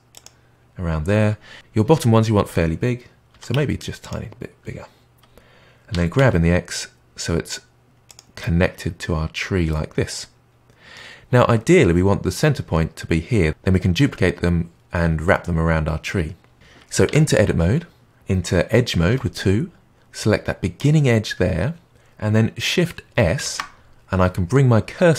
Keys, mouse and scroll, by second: 3.3 s, 5.9 g, 8.3-12.7 middle drag, 17.0 Tab, 19.1 2, 20.7 click, 23.4 shift+s.